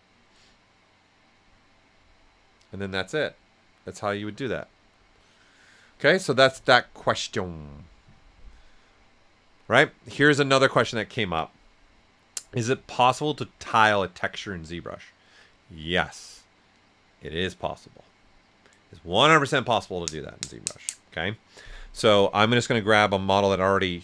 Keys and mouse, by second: 22.6-24.0 drag.